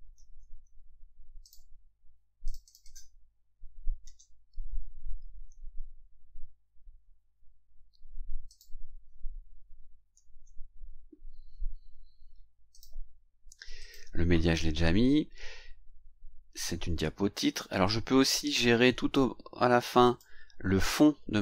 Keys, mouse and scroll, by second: 0.1 ctrl+c, 1.4 click, 2.4 click, 4.0 ctrl+v, 8.5 click, 10.1 ctrl+v, 12.7 click, 13.8 click, 17.8-19.3 drag, 20.0 click.